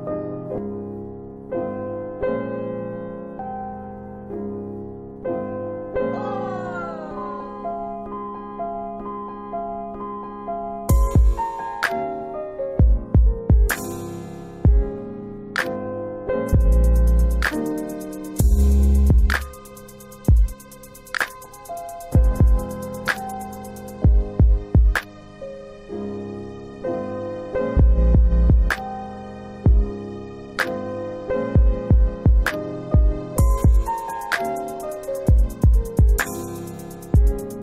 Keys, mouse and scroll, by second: 0.6 ctrl+click, 3.3 middle click, 3.5 scroll up 1, 5.4 ctrl+click, 8.5 ctrl+click, 9.9 click, 11.6 ctrl+click, 13.0 middle click, 13.5-14.1 scroll down 2, 16.8 click, 18.4 middle click, 19.1 F4, 19.8 F4, 20.3 middle click, 20.7 scroll down 1, 21.5 alt+w, 22.6 alt+w, 23.3 middle click, 23.9 alt+x, 24.9 scroll up 1, 25.3 scroll down 2, 26.3 alt+w, 26.9 alt+w, 27.4 middle click, 27.6 scroll down 2, 29.8 click, 30.3 middle click, 31.1 scroll down 1, 31.1 middle click, 32.2 click, 35.0 Delete, 35.9 alt+w, 36.4 alt+w, 37.4 alt+middle click.